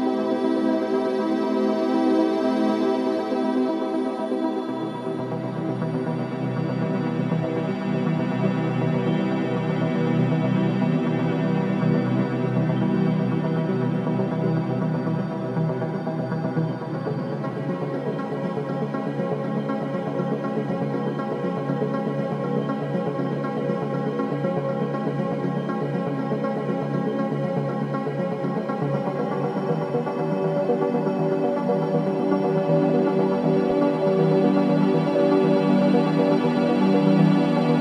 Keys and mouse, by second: 1.4 click, 1.7 click, 2.4 click, 3.6 click, 6.7 click, 8.0 shift+d, 8.9-13.3 drag, 16.4 click, 18.1 click, 18.9 click, 19.9 ctrl+alt+click, 20.5-21.8 alt+shift+drag, 22.4-24.3 drag, 24.9-27.5 drag, 29.5 click, 30.4-31.8 drag, 32.0 g, 32.3 z, 33.6-34.4 drag, 34.7-37.8 drag.